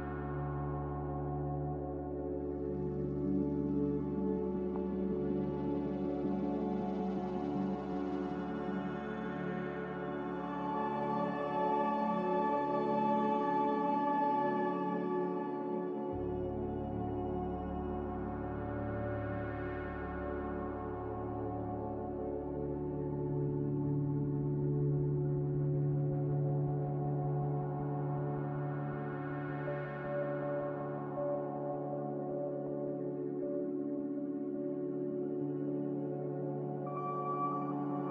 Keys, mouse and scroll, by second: 2.8 g, 5.1 z, 14.5 x, 16.6 m, 21.8-22.6 typing, 26.6-27.4 typing, 32.6 b, 37.5 ctrl+b.